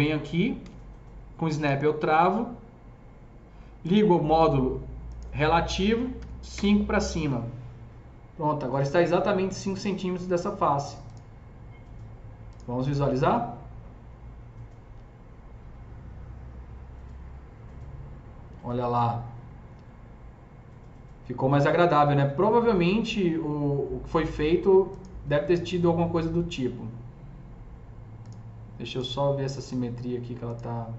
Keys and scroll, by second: 0.7 s, 6.0 KP_5, 6.4 Return.